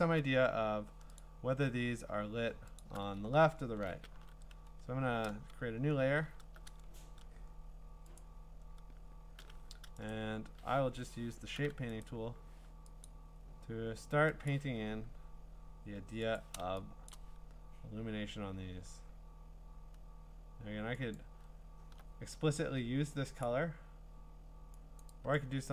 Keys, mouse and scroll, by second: 0.0 scroll, 1.2 click, 2.8 alt+click, 3.3-3.9 scroll, 4.2 b, 8.2 click, 10.1 right click, 10.8 Escape, 12.0 right click, 13.0 click, 14.6 click, 16.4 click, 17.1 click, 21.1 alt+click, 23.4 click, 25.1 click, 25.4 click.